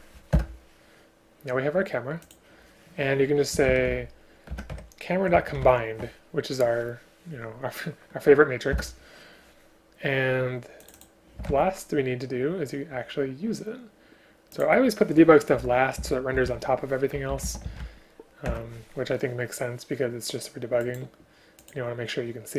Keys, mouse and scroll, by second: 0.4 Return, 4.6 Return, 8.7 Return, 11.5 ctrl+c, 16.0 Return, 16.5 ctrl+v, 18.5 Return.